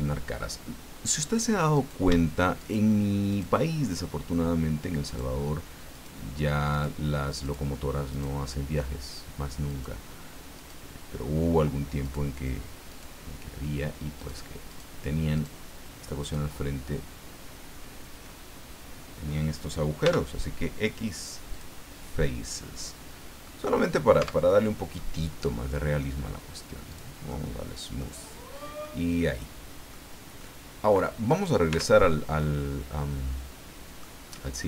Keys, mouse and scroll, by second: 1.7 right click, 2.6 shift+right click, 3.3 shift+right click, 5.1 shift+right click, 5.9 shift+right click, 6.7 shift+right click, 7.4 shift+right click, 8.1 shift+right click, 9.7 shift+right click, 10.6 shift+right click, 12.0 shift+right click, 12.9 shift+right click, 14.2 shift+right click, 14.7 shift+right click, 15.3 shift+right click, 16.2 shift+right click, 20.0 x, 21.5 click, 22.1-23.6 middle drag, 24.2 Tab, 24.9-26.1 middle drag, 26.9 click, 27.3 middle click, 28.4 scroll down 1, 28.8-30.1 middle drag, 30.1 scroll down 1, 30.4 middle click, 31.3 right click, 31.7 Tab, 32.4-34.2 middle drag.